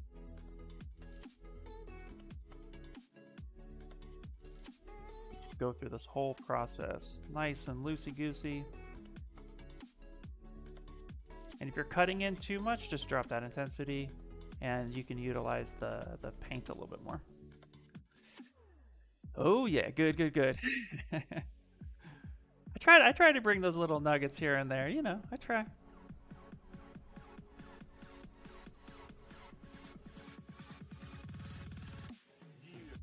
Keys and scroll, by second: 11.1 space, 31.9 s.